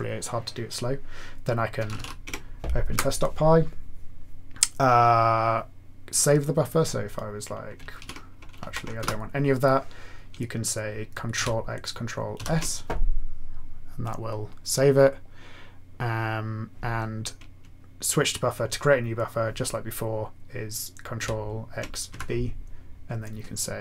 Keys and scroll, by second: 1.5-2.4 typing, 2.9 Return, 8.0 ctrl+e, 8.6 ctrl+shift+a, 9.0 BackSpace, 11.3 ctrl+x, 12.3 ctrl+s, 21.2 ctrl+x, 22.1 typing.